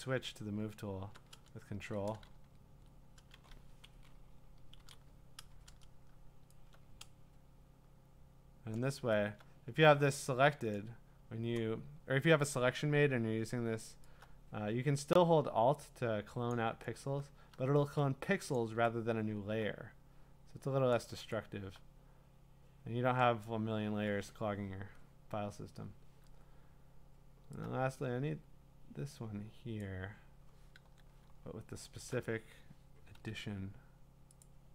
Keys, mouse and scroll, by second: 2.3 ctrl+z, 3.5 v, 4.6 shift+Left, 4.8 shift+Left, 8.7 click, 10.7 click, 13.8 click, 16.5 click, 18.5 click, 20.9 click, 23.4 click, 27.4 click, 29.8 click, 30.8 ctrl+d, 31.3-32.1 scroll, 33.1 i, 34.4 click.